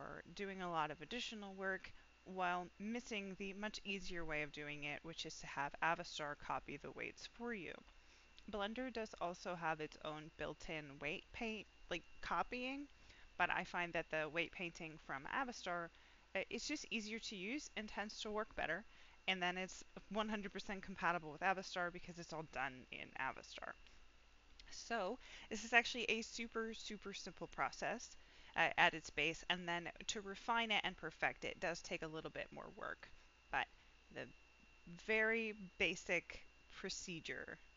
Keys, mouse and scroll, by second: 25.0 click.